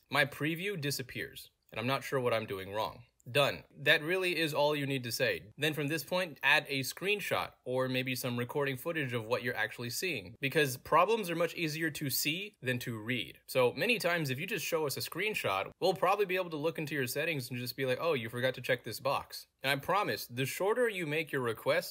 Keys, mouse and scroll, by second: 0.4-0.8 drag, 1.1 click, 1.5-5.3 typing, 5.5 click, 6.0 click, 6.8 click, 8.7 Print, 9.3 click, 9.7 ctrl+v, 10.3 click, 10.8 click, 12.7 click, 13.6 click, 14.6 scroll up 1, 15.2 click, 15.7 click, 17.3 click, 17.9 click, 18.4 click, 19.0 click.